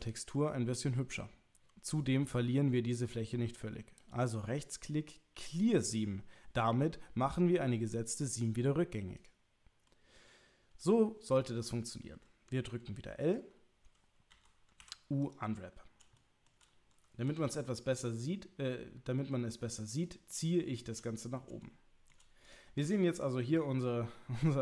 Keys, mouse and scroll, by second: 0.3 middle click, 4.0-8.4 right drag, 9.9-11.3 middle drag, 14.3 l, 14.8 u, 16.2 shift+click, 17.3 g, 20.0 click, 20.7 shift+middle click, 21.7 shift+middle click, 22.5 click, 23.2 click.